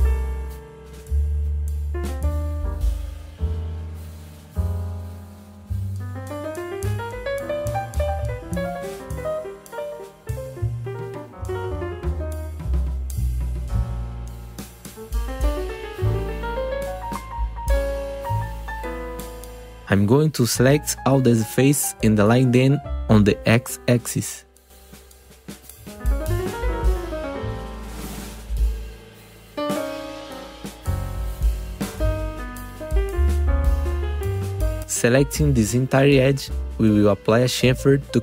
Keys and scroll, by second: 0.3 ctrl+z, 5.6 ctrl+z, 7.2 ctrl+z, 8.0 ctrl+b, 8.4 Return, 8.8 F3, 13.0 F3, 13.4 3, 13.8 F3, 14.4 2, 15.9 ctrl+b, 16.3 Return, 17.3 4, 25.3 F3, 29.4 F3, 30.1 F4, 32.0 ctrl+z, 33.5 2, 37.3 F3.